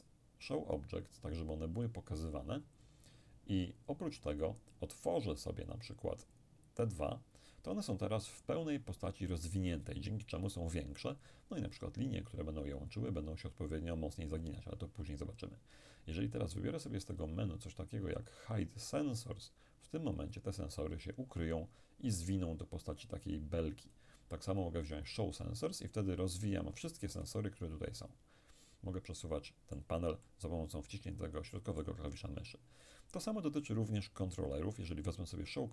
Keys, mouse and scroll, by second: 0.5 click, 1.8-3.9 drag, 5.7 click, 17.2 click, 20.2 click, 23.9 click, 26.0 click, 27.2-32.8 middle drag, 34.0 click.